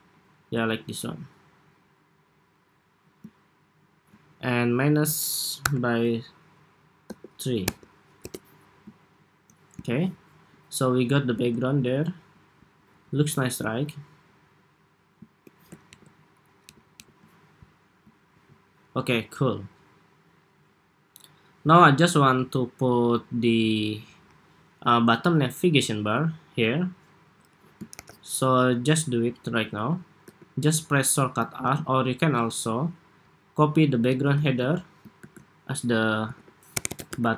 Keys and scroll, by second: 15.6 alt+shift+Up, 16.5 alt+Down, 18.2 super+s, 27.6 super+=, 32.3 Escape, 34.1 super+d, 35.0 super+r.